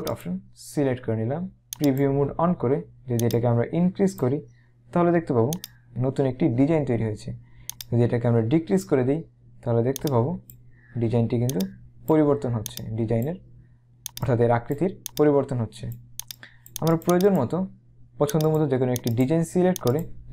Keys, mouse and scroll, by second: 0.2 click, 1.8 click, 3.3 click, 5.6 click, 7.8 click, 10.0 click, 11.6 click, 18.5 click.